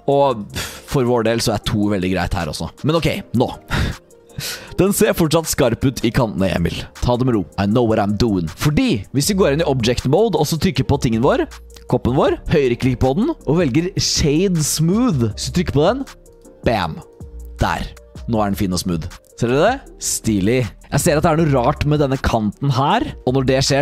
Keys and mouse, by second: 0.3 click, 9.1 click, 9.1 middle click, 10.4 click, 12.9-16.4 drag, 17.5-19.9 drag, 20.5 shift+drag, 20.8 Tab, 20.8 click, 21.8 drag, 22.2 click, 23.0 click, 23.2 shift+3, 23.4 click.